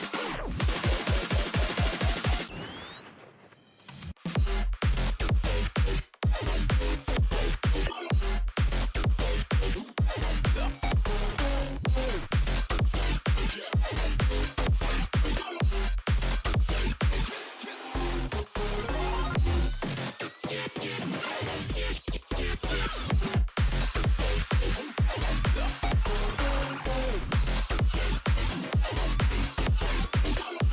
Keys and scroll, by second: 5.6-6.6 typing, 9.3-11.8 typing, 13.0 Return, 22.6-23.4 typing.